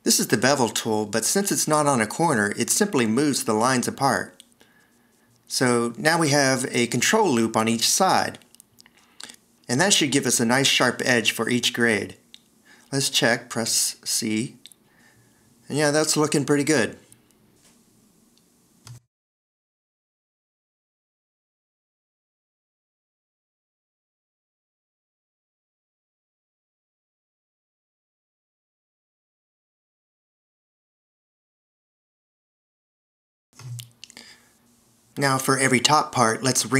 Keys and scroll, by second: 8.2 shift+super+a, 14.1 c, 17.4 Escape, 19.4 shift+super+i, 20.9 Escape, 24.8 3, 25.4 Escape, 25.8 s, 26.6 alt+e, 29.0 Escape, 34.8 v.